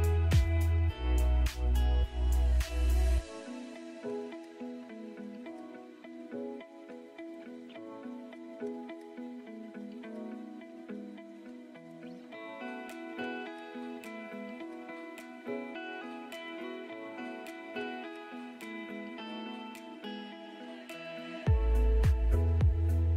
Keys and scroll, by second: 1.7-2.5 typing, 3.1 ctrl+z, 11.9 e, 12.5 Escape, 13.2 ctrl+z, 22.5 Delete.